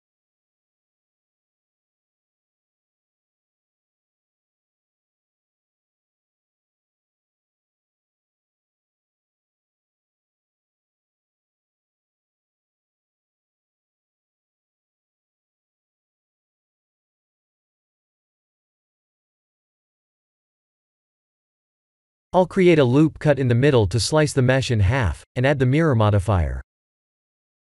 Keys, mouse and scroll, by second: 0.1 click, 0.8 ctrl+click, 1.1 middle click, 3.0 shift+click, 3.4 ctrl+click, 3.9 shift+click, 4.4 s, 6.5 Tab, 6.8 middle click, 7.4 middle click, 7.7-8.4 scroll down 5, 8.4 middle click, 9.8-10.3 scroll up 2, 10.8 scroll up 1, 10.8 KP_1, 11.4 shift+z, 12.7 shift+z, 13.5 click, 14.8 ctrl+1, 16.1 middle click, 19.1 Tab, 20.1 middle click, 21.7 3, 22.0 click, 22.4 middle click, 24.1 ctrl+r, 26.2 KP_1, 26.9 KP_3, 27.3 shift+z.